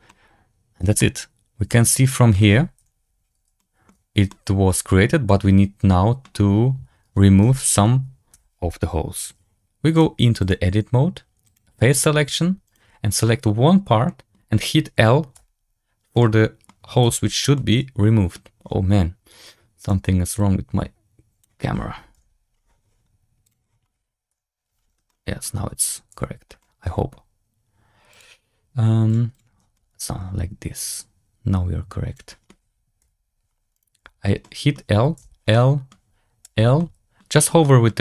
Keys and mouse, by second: 0.0-0.7 middle drag, 0.9-2.2 middle drag, 2.7 KP_Decimal, 3.5 shift+drag, 4.2-6.1 middle drag, 7.4 Tab, 8.2 3, 14.0 middle click, 15.3 l, 16.1 middle click, 16.9 l, 17.6 middle click, 19.7 click, 20.3-21.4 drag, 22.0 KP_Decimal, 23.4 click, 24.2 KP_Decimal, 25.0 shift+click, 26.0 l, 26.5 shift+click, 29.2 click, 30.7-32.0 drag, 32.9 KP_Decimal, 33.9 l, 34.4 middle click, 35.1 l, 35.5 middle click, 36.3 l, 36.8 middle click, 37.6 middle click.